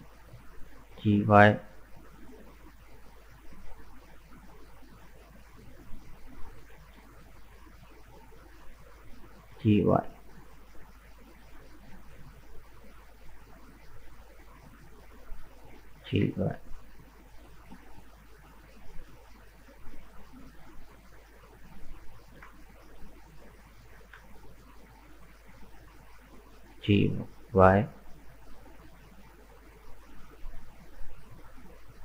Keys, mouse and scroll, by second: 0.0 middle click, 0.9 g, 3.2-4.6 shift+middle drag, 4.6 right click, 4.9-5.9 middle drag, 5.9 shift+right click, 6.7 ctrl+z, 7.7 shift+right click, 8.4 shift+right click, 8.7 middle click, 9.5 g, 11.6 shift+scroll down 1, 11.6-13.3 shift+middle drag, 13.3 right click, 13.8 shift+right click, 14.3 shift+right click, 14.6-16.0 middle drag, 16.0 g, 19.3-20.3 middle drag, 20.3 right click, 20.9 middle click, 21.4 right click, 22.1-22.5 scroll up 1, 22.5-23.8 shift+middle drag, 23.8 right click, 24.4 shift+right click, 24.9 shift+right click, 25.2 scroll down 4, 25.5-26.7 middle drag, 26.7 g, 29.2-30.4 middle drag, 30.4 scroll up 1, 30.7-32.0 middle drag.